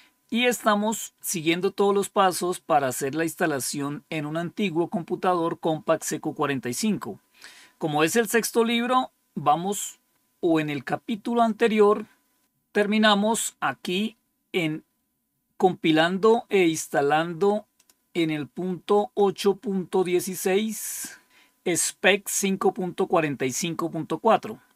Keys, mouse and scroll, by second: 10.0 scroll down 2, 10.8 scroll down 3, 11.5-11.9 scroll down 4, 17.7 click.